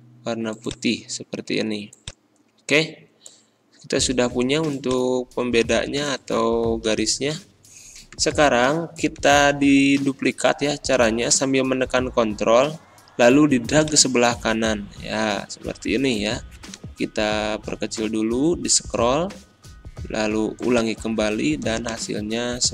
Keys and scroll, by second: 6.9 Down.